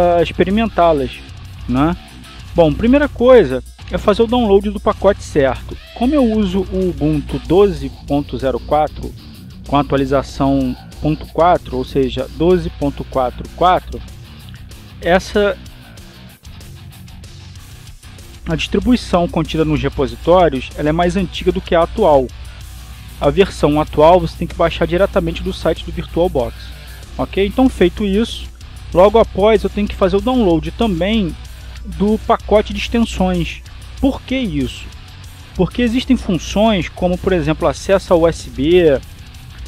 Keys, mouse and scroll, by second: 4.6 click, 17.0 click, 23.1 click, 29.0 click, 30.2 click, 34.6 click, 36.6 click.